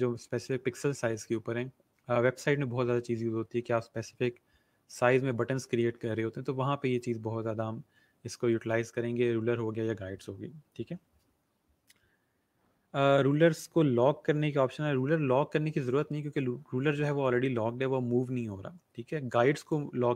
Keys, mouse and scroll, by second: 19.6 click.